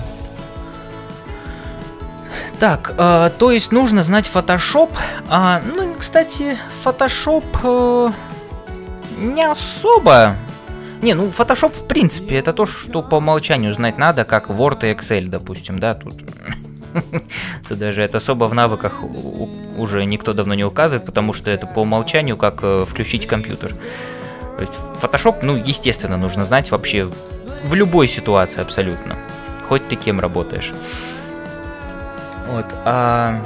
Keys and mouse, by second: 8.4 shift+middle click, 8.9 middle click, 10.2 click, 13.6 middle click, 14.2 click, 14.8 f, 15.3 middle click, 16.8 click, 17.4 f, 17.9 middle click, 18.4 click, 18.9 middle click, 19.9 g, 21.2-22.4 middle drag, 22.8 click, 23.4 g, 24.2-25.2 middle drag, 27.0 middle click, 27.5 middle click, 28.6 shift+middle click, 29.6 ctrl+s, 30.1 middle click, 30.7 middle click, 31.2 middle click.